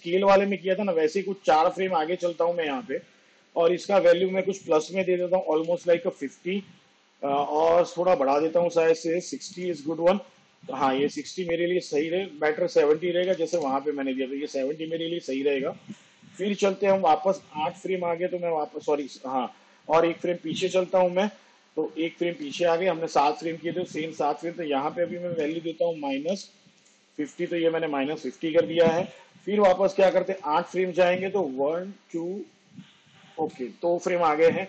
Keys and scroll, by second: 2.5 ctrl+Right, 5.7 0, 9.4 6, 13.5 7, 17.4 shift+Page_Down, 21.9 ctrl+Left, 25.6 -, 26.3 5, 30.0 shift+Page_Down, 31.9 ctrl+Left.